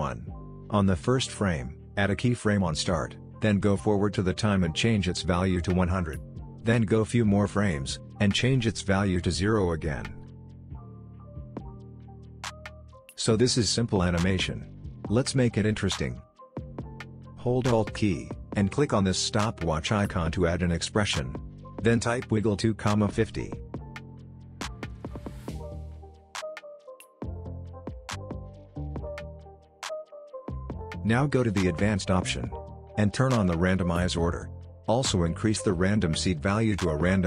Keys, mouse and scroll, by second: 2.9-4.4 drag, 12.2 space, 16.3-17.9 drag, 21.0-22.4 typing, 22.6 Return, 24.5 ,, 26.6 click, 28.1 space, 30.7 space, 31.7-32.6 scroll down 1, 32.6 click, 33.0-34.0 scroll down 1, 34.0-35.5 drag.